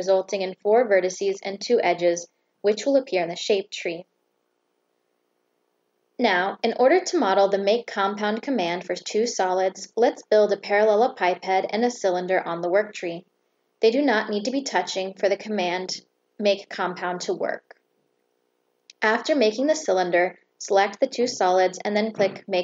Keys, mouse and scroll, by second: 0.7 click, 1.1 click, 1.4 click, 1.9 click, 3.0 click, 3.4 click, 3.7 click, 4.7 click, 5.0 click, 5.4 click, 5.7 click, 6.1 click, 6.6 click, 7.9 click, 9.5 click, 10.5 click, 11.1 click, 12.3 click, 16.0 click, 17.1 click, 18.5 click, 20.1 click, 22.0 click.